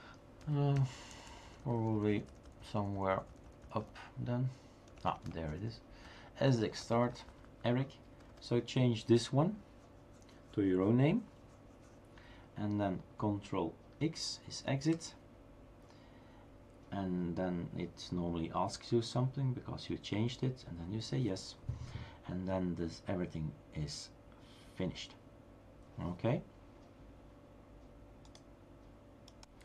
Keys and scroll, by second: 4.9 Down, 6.8 Right, 7.8 Right, 8.1 Right, 8.3 Right, 8.5 Right, 14.8 ctrl+x.